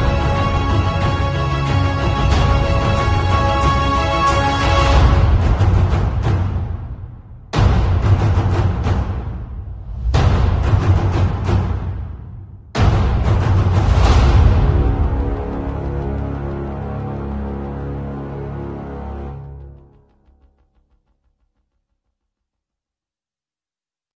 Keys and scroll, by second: 0.0-0.8 typing, 3.0 6, 3.2 space, 6.3-8.4 typing, 9.5-12.3 typing, 13.8 x, 14.7 x, 15.2 space, 17.7 x, 18.6 x, 19.4 space, 19.7 x, 21.2 z, 23.4 b.